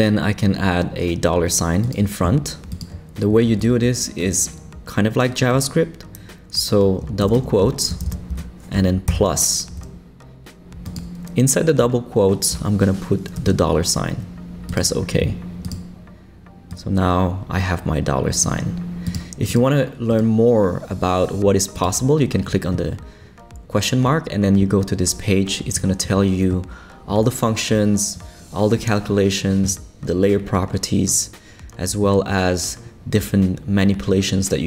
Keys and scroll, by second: 3.6 super+Left, 7.2 shift+', 7.9 shift+space, 8.3 Left, 9.1 shift+=, 13.4 shift+4.